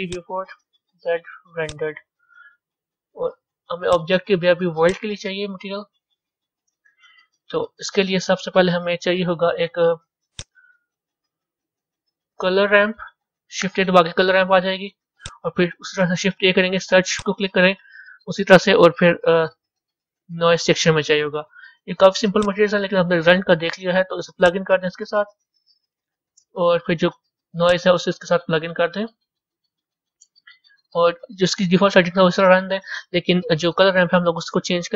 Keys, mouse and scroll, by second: 0.0-1.6 drag, 1.6 z, 24.4 click, 27.5 click.